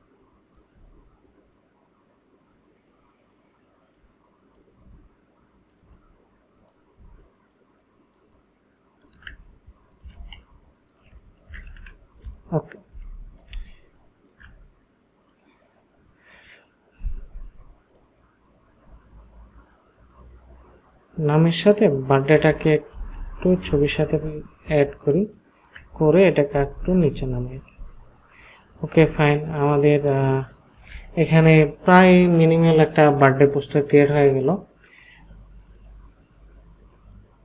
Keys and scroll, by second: 7.0 ctrl+space, 10.2 ctrl+a, 11.5 ctrl+d, 12.9 ctrl+;, 13.5 space, 22.9 shift+Up, 23.6 shift+Up, 26.5 Down, 26.7 Down, 26.9 Down, 27.1 Down, 29.0 ctrl+space.